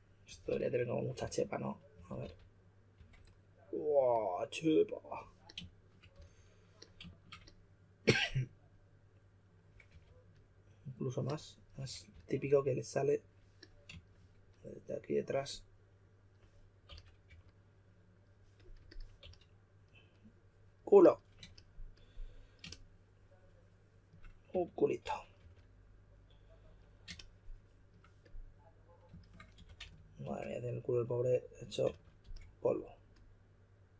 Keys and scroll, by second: 0.2-2.9 typing, 6.1 s, 9.9 typing, 11.8-12.1 typing, 16.6-17.7 typing, 19.2 s, 21.1-21.9 typing, 24.2-25.9 typing, 29.3-30.7 typing, 31.8-32.2 typing.